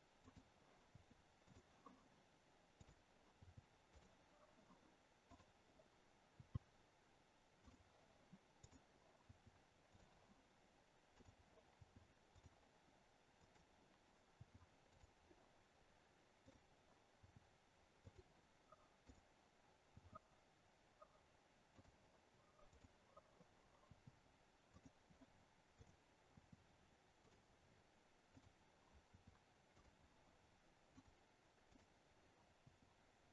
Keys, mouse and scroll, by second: 0.2 click, 0.8 i, 2.8 click, 3.3 i, 5.3 click, 6.3 i, 8.7 click, 9.2 i, 11.1 click, 11.7 i, 13.4 click, 14.3 i, 16.5 click, 17.1 i, 19.1 click, 19.9 i, 22.7 click, 23.8 i, 25.7 click, 26.2 i, 28.3 click, 29.0 i, 31.0 click, 31.7 click, 32.5 i.